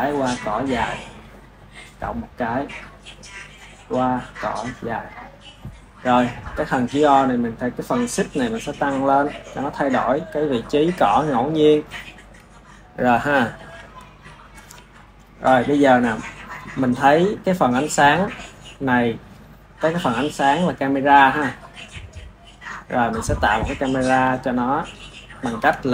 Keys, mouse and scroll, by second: 1.7 click, 2.9-5.1 drag, 6.3 click, 8.7-10.4 drag, 11.6-13.6 shift+middle drag, 13.6 ctrl+s, 13.8 ctrl+s, 20.6-22.9 drag, 22.9-25.9 middle drag.